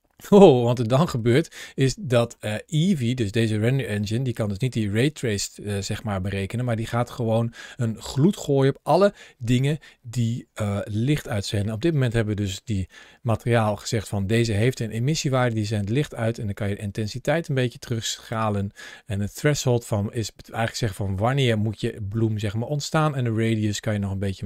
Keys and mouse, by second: 2.1-4.2 middle drag, 15.4-18.1 drag, 19.0-21.9 drag, 22.7-24.4 drag.